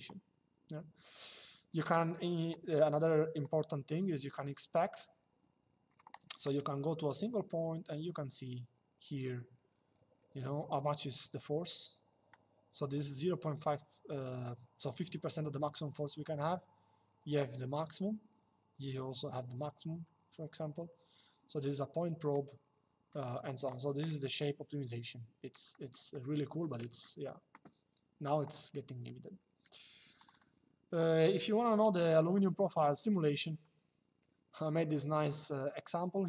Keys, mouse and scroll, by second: 4.6 click, 21.9 click, 25.4 middle click, 25.8 shift+middle click, 26.4 middle click, 29.9 click, 33.3 shift+middle click.